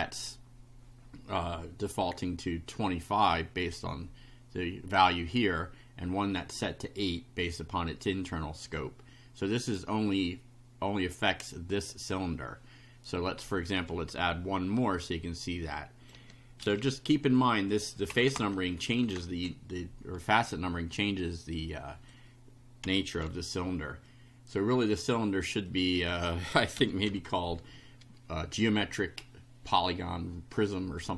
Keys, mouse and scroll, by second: 3.7-5.0 drag, 7.9 click, 11.8 click, 13.1 click, 14.8-16.2 drag, 16.6 ctrl+c, 17.6 click, 18.4 Return, 19.2 ctrl+Return, 19.3 ctrl+v, 21.7 click, 22.8 4, 23.2 F5, 24.0-25.1 drag, 25.6 click, 26.8 4, 27.1 F5.